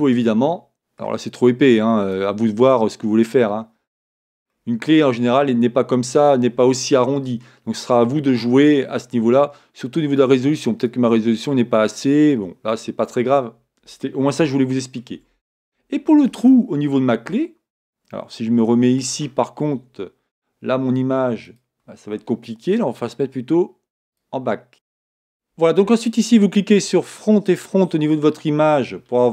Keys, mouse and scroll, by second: 0.1-3.2 middle drag, 3.2-4.6 drag, 4.6-21.7 middle drag, 5.6-8.2 scroll up 2, 8.2-14.5 scroll up 1, 17.3 KP_1, 21.7 click, 24.2 click.